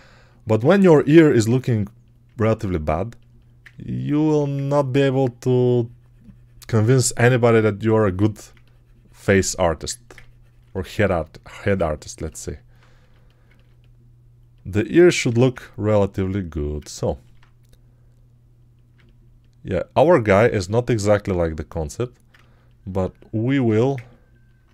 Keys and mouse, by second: 4.1 1, 15.1 g.